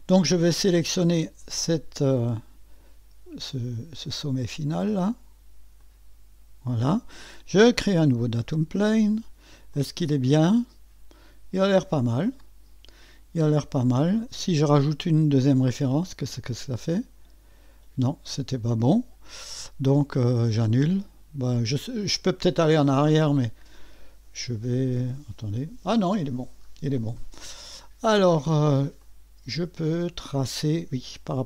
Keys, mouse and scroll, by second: 0.0-0.8 scroll up 1, 5.8 click, 8.2 click, 9.4 scroll down 1, 9.8-14.3 drag, 15.4 click, 16.8 click, 17.2 click, 20.5-23.0 drag, 25.4 click, 26.7-27.3 scroll up 1, 27.4-28.8 drag, 29.0-31.4 drag.